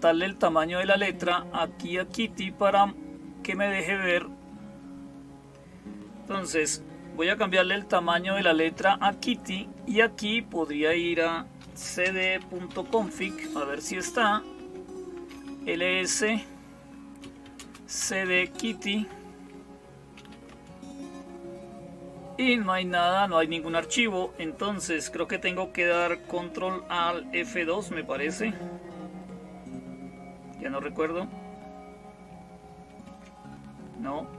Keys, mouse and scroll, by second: 1.9 click.